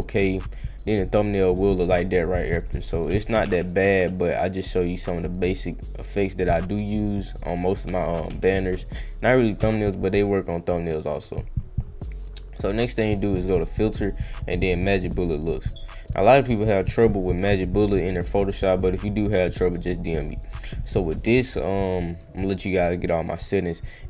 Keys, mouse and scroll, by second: 0.3-1.9 drag, 2.1 click, 3.4 ctrl+z, 3.8 ctrl+z, 5.2 click, 6.1 click, 7.3 click, 7.9 Caps_Lock, 12.8 click, 14.9 click, 20.3 click, 21.1 click, 21.5 click, 22.1 click, 22.6 click, 23.0 click.